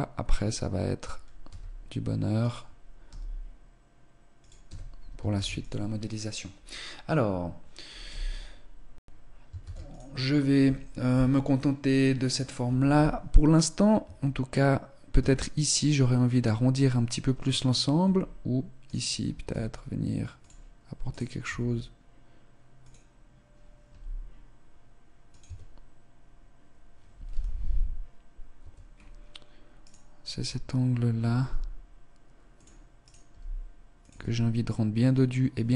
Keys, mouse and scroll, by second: 1.5 s, 3.1 g, 4.7 Tab, 5.4 ctrl+s, 8.1 z, 8.9-9.3 scroll down 2, 9.5 ctrl+s, 13.9 Tab, 15.1 Tab, 17.9 Tab, 18.7 right click, 19.5 s, 20.3 click, 20.8 right click, 21.4 s, 23.8 g, 25.3 Tab, 27.2 z, 28.5 Tab, 28.8-29.2 scroll up 3, 29.3 right click, 31.3 g, 32.9 right click, 33.2 g, 34.1 Tab.